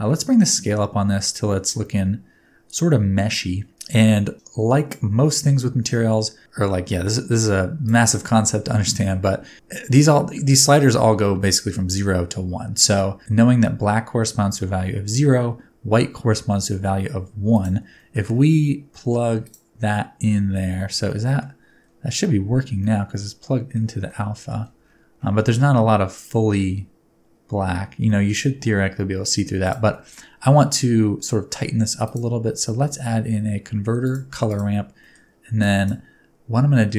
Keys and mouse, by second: 5.2 middle click, 6.4-8.0 drag, 9.0 middle click, 16.8 middle click, 19.0 middle click, 21.2 middle click, 22.8-23.8 middle drag, 24.1 shift+middle click, 28.1 shift+middle click, 29.9 middle click, 31.6 middle click, 32.6 shift+a, 34.9 middle click, 35.6 middle click.